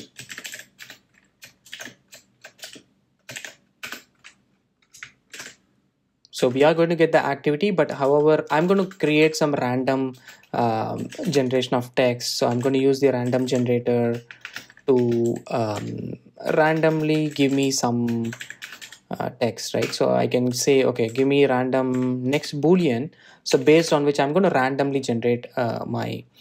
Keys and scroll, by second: 6.6 super+v, 19.9 Return.